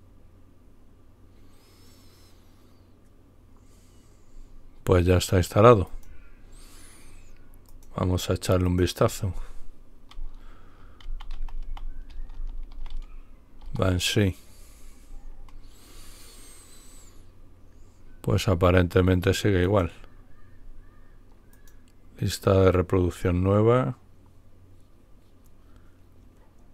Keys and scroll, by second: 10.8-13.1 typing, 13.5 Return.